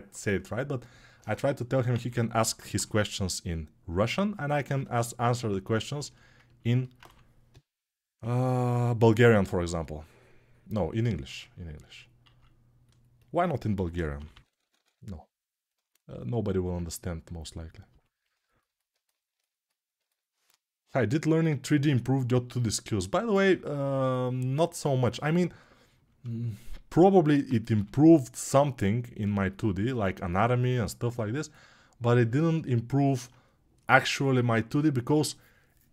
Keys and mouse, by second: 4.1-9.4 alt+right drag, 6.8 3, 9.4 [, 13.5 g, 15.9-18.4 alt+right drag, 18.4-35.9 alt+drag.